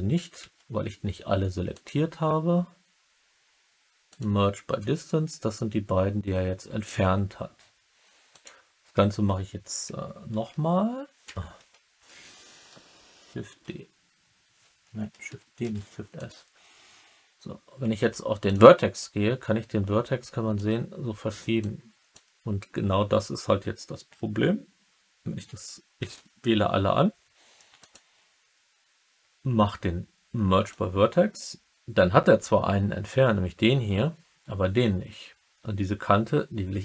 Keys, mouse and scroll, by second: 0.3 a, 1.7-4.1 drag, 8.3 click, 10.3 shift+s, 13.6 shift+s, 15.6 shift+d, 16.1 click, 17.9 1, 18.9-20.5 drag, 21.6 click, 25.9 a, 27.8-30.6 drag.